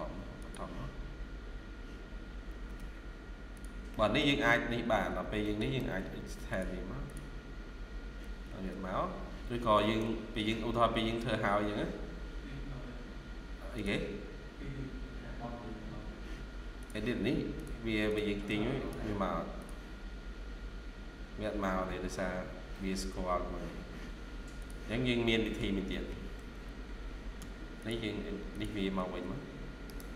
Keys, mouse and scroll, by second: 2.2-2.6 scroll up 2, 2.4 Escape, 2.9 Escape, 3.8 middle click, 4.4 scroll down 1, 4.7 Escape, 4.9 Escape, 5.3 middle click, 5.6 typing, 8.4 Escape, 8.6 Escape, 9.1 scroll down 1, 9.6 middle click, 18.4 double click, 21.9-22.3 scroll up 1, 25.3 middle click, 26.3 typing, 27.3 Tab, 27.5 typing, 28.8 Escape, 29.1 Escape, 29.7 right click.